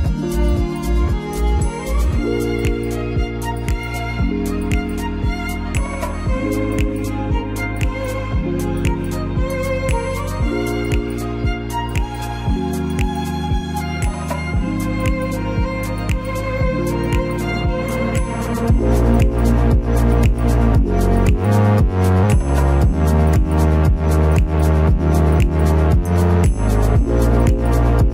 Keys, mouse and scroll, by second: 9.1 space, 10.1 shift+middle click, 11.2-11.5 shift+scroll down 2, 13.7 shift+middle click, 16.8 shift+middle click, 19.0 shift+middle click, 19.7 shift+middle click, 27.7 shift+middle click.